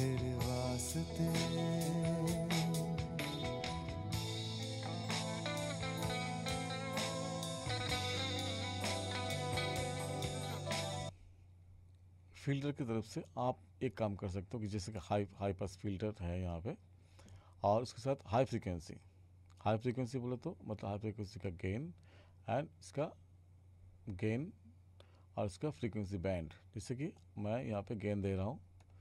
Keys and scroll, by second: 11.0 space.